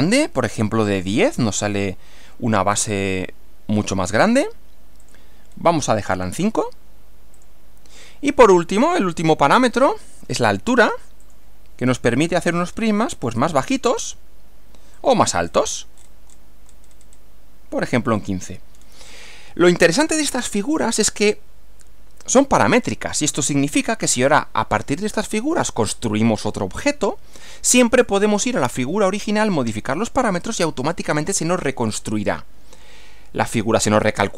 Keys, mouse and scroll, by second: 0.5 click, 1.0-1.4 scroll down 2, 1.7-3.1 middle drag, 3.2-4.1 middle drag, 5.0 click, 5.5-6.0 scroll down 2, 6.1-6.7 scroll down 4, 7.4 click, 8.6-9.7 middle drag, 9.7 scroll up 2, 11.3 click, 11.9 scroll down 1, 14.0 click, 15.0 click, 15.4-15.9 scroll up 1, 16.3 scroll down 1, 16.7-17.3 scroll up 1, 18.2 click, 18.7 scroll down 2, 19.5-20.5 middle drag, 20.7-22.6 middle drag, 22.9 middle click, 32.2-33.9 middle drag.